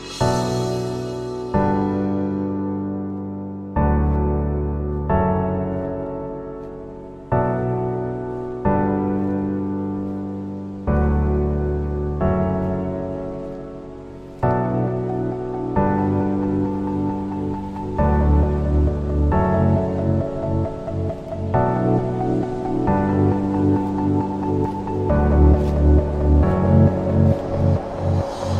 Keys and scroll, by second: 0.2 shift+Page_Down, 1.0 alt+c, 1.1 alt+w, 1.5 p, 3.0 Escape, 13.6 Escape, 18.8 F2, 23.3 Escape.